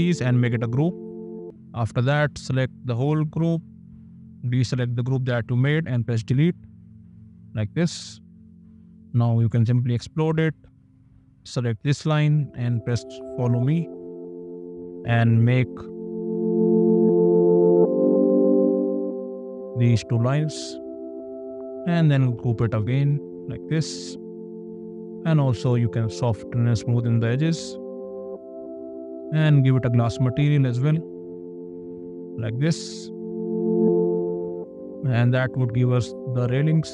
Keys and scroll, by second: 0.7 ctrl+g, 5.9 d, 9.9 shift+x, 12.8 ctrl+f, 16.0 space, 18.6 ctrl+f, 19.0 space, 22.6 ctrl+g, 30.5 b, 31.3 space.